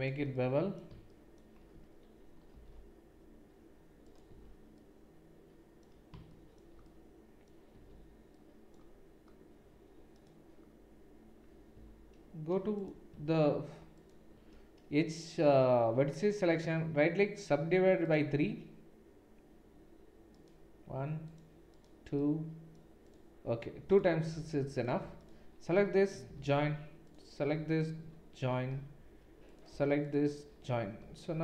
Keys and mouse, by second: 2.5 ctrl+b, 4.5 Tab, 7.7 Tab, 10.1 click, 10.1 middle click, 11.7 1, 12.8 click, 23.9 click, 23.9 middle click, 26.3 j, 27.8 click, 27.8 middle click, 28.7 j, 29.5 click, 29.5 middle click, 31.0 j.